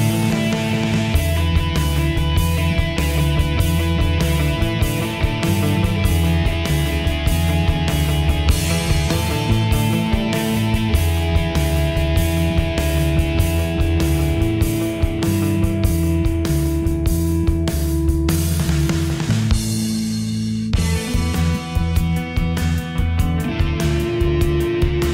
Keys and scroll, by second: 9.1 ctrl+j.